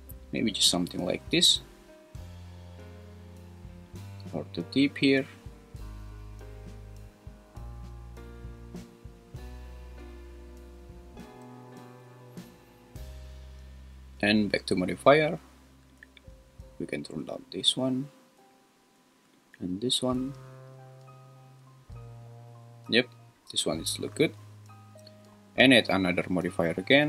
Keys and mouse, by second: 3.9-10.2 drag, 16.0-18.4 drag, 19.3-22.0 drag, 26.3-27.0 drag.